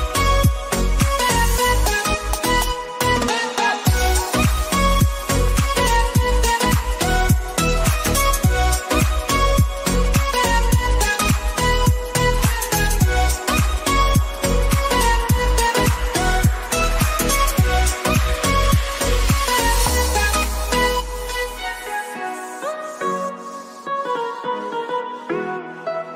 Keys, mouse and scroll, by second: 1.7-7.3 drag, 11.6 click, 17.4 click, 19.0-25.5 drag.